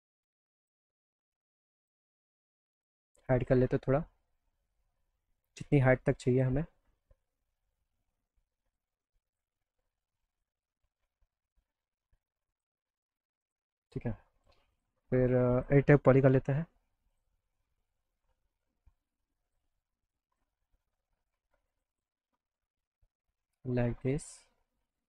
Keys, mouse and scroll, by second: 0.6 click, 1.8 click, 2.8 click, 4.0-6.4 drag, 8.8 click, 10.4 click, 10.6-12.6 drag, 13.4 click, 14.7 click, 15.6 click, 16.2 e, 17.1 click, 19.4 click, 20.2 click, 21.7 click, 21.9 click, 22.8-24.1 drag.